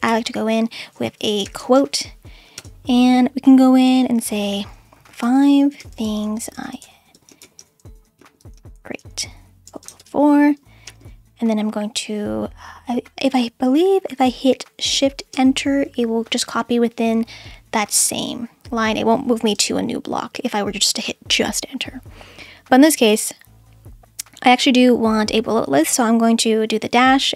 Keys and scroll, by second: 0.1-2.2 typing, 2.6 Return, 4.9-10.8 typing, 15.3 shift+Return, 19.4 Return, 21.0 Return, 26.9 -.